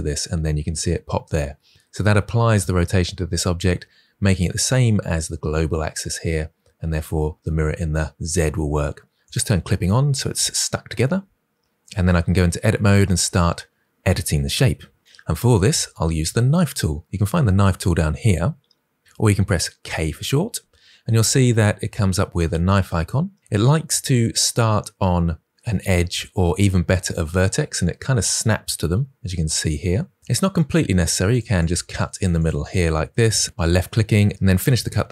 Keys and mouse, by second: 9.1 click, 11.9 Tab, 19.7 k, 31.2 click, 31.5 click, 32.5 click.